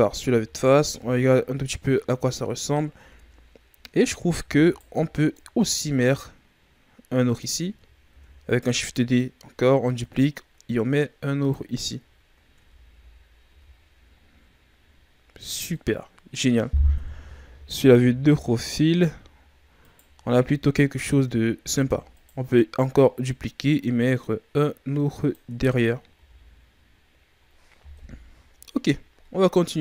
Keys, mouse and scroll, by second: 0.1-0.9 scroll down 8, 0.4 a, 0.9 a, 2.1-2.9 scroll up 9, 2.9 Tab, 3.6-4.3 scroll up 2, 4.3 shift+d, 5.3 click, 8.0 shift+d, 9.1 click, 11.7-12.5 scroll down 7, 12.5 Tab, 12.8 a, 13.2-14.2 scroll down 9, 13.4 a, 15.0-15.7 ctrl+scroll down 1, 15.7-17.0 middle drag, 17.0 KP_3, 17.7-18.0 scroll up 8, 18.9-19.8 scroll up 3, 19.8 right click, 20.1 Tab, 21.6 shift+d, 22.8 click, 25.5 Tab, 25.9-27.9 scroll down 9, 26.1 a, 27.9 KP_1.